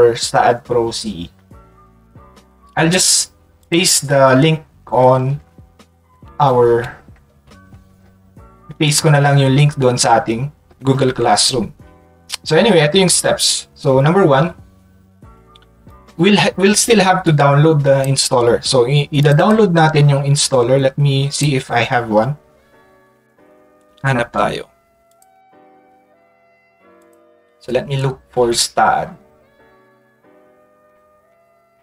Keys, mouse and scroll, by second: 3.6 click, 14.3 middle click, 15.9-18.0 drag, 19.2 click, 19.4 click, 21.3 click, 25.1 click.